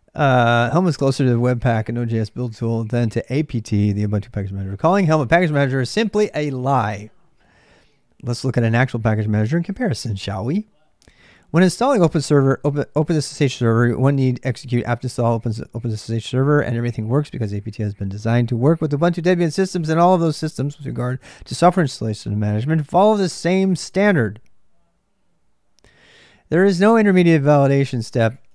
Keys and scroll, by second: 0.0-28.5 typing.